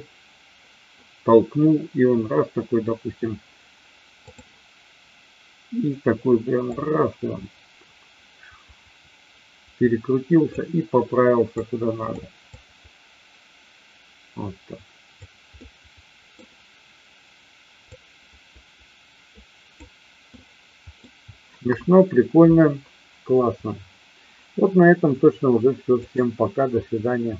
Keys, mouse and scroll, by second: 6.5-10.5 drag, 11.5 click, 12.5-15.2 drag, 15.5-16.3 middle drag, 17.9-19.8 drag, 20.3-21.0 middle drag, 21.7 KP_1.